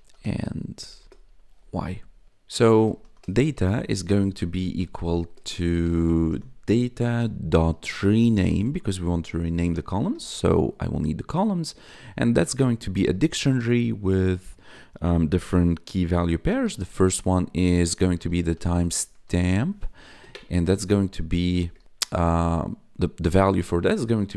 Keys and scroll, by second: 0.0-10.4 typing, 10.9 Tab, 12.1 shift+[, 13.0 ', 16.2-22.1 typing, 20.0 Right, 20.2 Left, 24.1-24.3 typing.